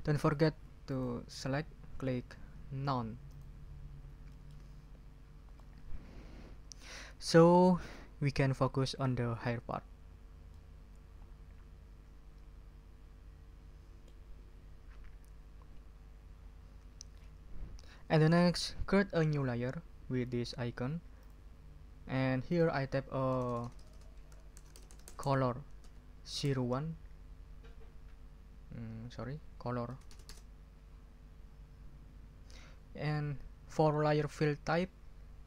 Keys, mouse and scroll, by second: 3.3 click, 4.3 ctrl+click, 5.1 ctrl+scroll up 2, 5.5-6.9 ctrl+middle drag, 10.5 middle click, 10.9 click, 11.5-14.2 middle drag, 21.2 click, 22.4 click, 23.3-27.1 typing, 29.9 BackSpace.